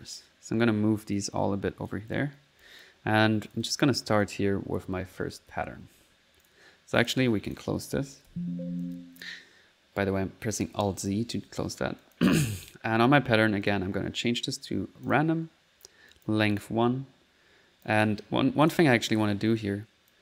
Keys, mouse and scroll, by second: 0.6 right click, 1.1 click, 1.4 right click, 2.0 click, 2.3 click, 2.7 click, 3.5 click, 4.0 click, 4.0-5.5 typing, 6.5 click, 7.0 click, 7.5 click, 7.8 click, 8.3 alt+z, 8.8 alt+click, 12.0 click, 13.6 click, 15.1 click, 16.1 click, 17.4 middle click, 17.7 middle click, 17.8 click, 18.6 click, 20.1 click.